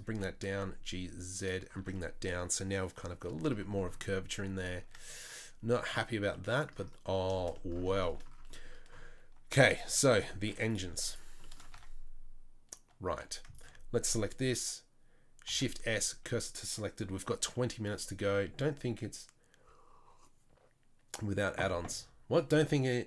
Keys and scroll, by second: 0.1 g, 1.8 Tab, 5.8 Tab, 6.1 Tab, 10.5 Tab, 10.9 Tab, 11.7 Tab, 13.1 2, 15.5 shift+s.